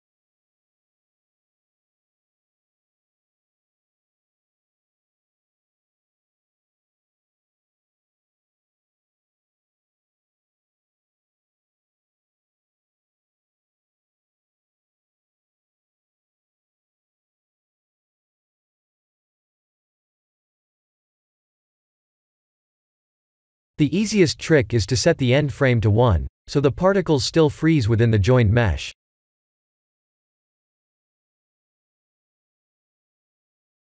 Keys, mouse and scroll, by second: 2.4-4.5 middle drag, 5.7 click, 10.7-12.4 drag, 11.7 0, 17.9 click, 19.4 click, 19.8-20.9 middle drag, 22.9-25.7 middle drag, 26.5 click, 29.6 click, 31.4 click, 31.9 ctrl+a, 33.2 click.